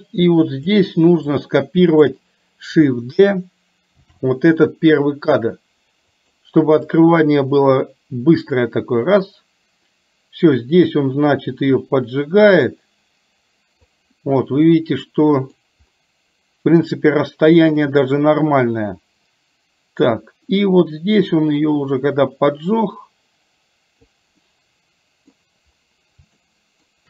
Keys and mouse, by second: 1.4 click, 4.2 shift+d, 7.1-13.9 drag, 14.8 middle click, 17.9-24.2 drag, 24.6 middle click, 26.4 shift+middle click.